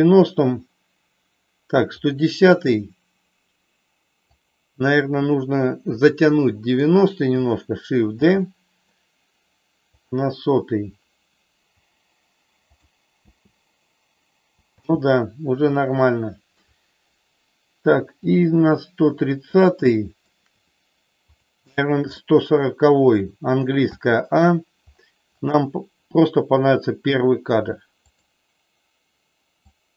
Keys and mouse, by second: 2.0 click, 4.3 click, 6.2 click, 8.1 shift+d, 12.7 click, 13.2 space, 14.7 space, 15.8 shift+middle click, 18.2 click, 19.7 shift+middle click, 21.3 click, 22.1-23.1 shift+middle drag, 24.0 a, 28.1 click, 29.7-29.9 drag.